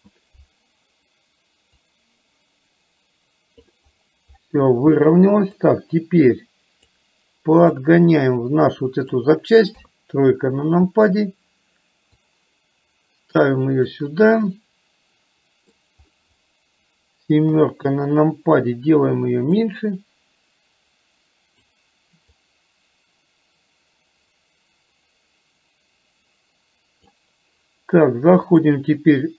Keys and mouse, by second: 1.7 click, 2.2-3.7 drag, 5.7-7.0 drag, 7.8-9.2 drag, 9.8 KP_3, 12.3-14.0 drag, 14.5-15.8 middle drag, 17.6 KP_7, 19.8-21.7 drag, 22.6-27.2 drag, 28.6-29.3 drag.